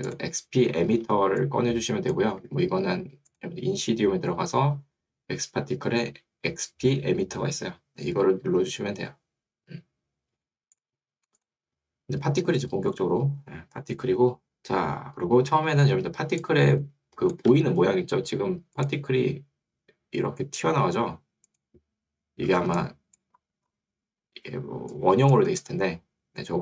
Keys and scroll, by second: 2.5 Escape, 17.5 Escape, 25.7 Escape.